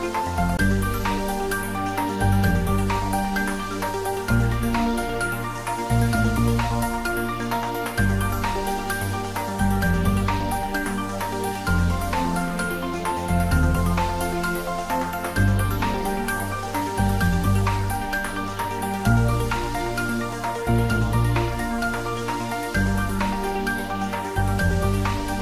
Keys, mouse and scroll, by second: 0.3 shift+z, 1.2 scroll up 1, 1.9 click, 2.2 middle click, 2.9-4.7 scroll up 1, 5.4 scroll up 1, 21.2 shift+a, 25.0 click.